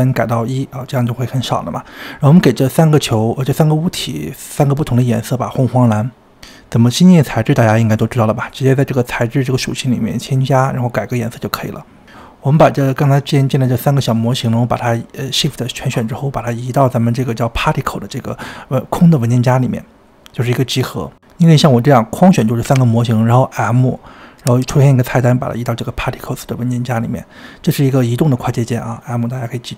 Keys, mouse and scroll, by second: 0.4 g, 4.6 click, 5.2 click, 5.7-6.4 drag, 7.7-8.0 drag, 8.8 click, 9.2-9.6 drag, 11.7 click, 12.1-12.9 scroll down 4, 13.3 click, 14.0 click, 14.6 shift+click, 16.5 click, 19.2 click, 19.9 click, 21.3 click, 22.7 m, 26.2 click, 27.9 click, 29.0-29.6 scroll down 2, 29.6-29.7 shift+middle drag.